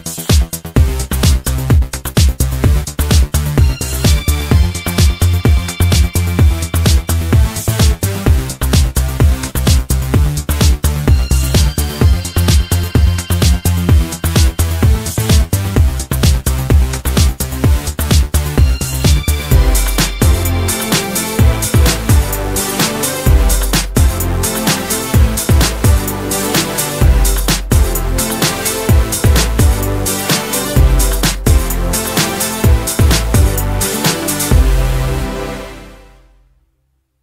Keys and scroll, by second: 0.0-1.0 typing.